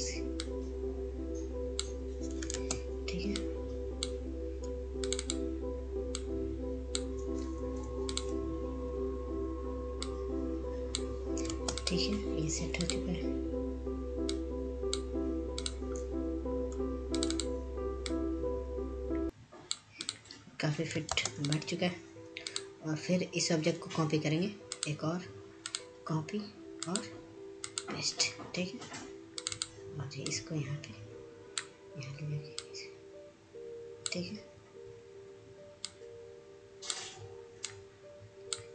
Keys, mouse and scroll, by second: 5.9 ctrl+space, 6.8 click, 7.9 scroll up 1, 8.5 click, 11.1 ctrl+z, 11.6 click, 13.6 click, 15.1 ctrl+space, 15.3 click, 19.4 scroll down 1, 20.0-20.4 scroll up 1, 20.4 click, 23.8 scroll down 1, 24.4 ctrl+space, 24.8 click, 28.2 click, 32.9-38.7 drag.